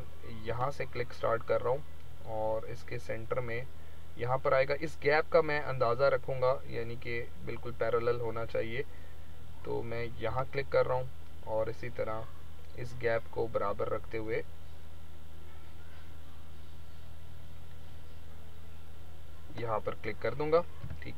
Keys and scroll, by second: 20.7 v.